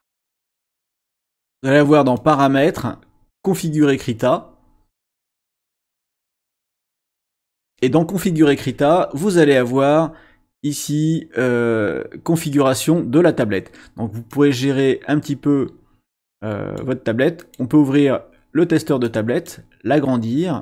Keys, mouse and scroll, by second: 0.0 click, 2.2 click, 5.4 click, 12.4 click, 14.3-17.0 drag, 17.4 click, 19.0 click.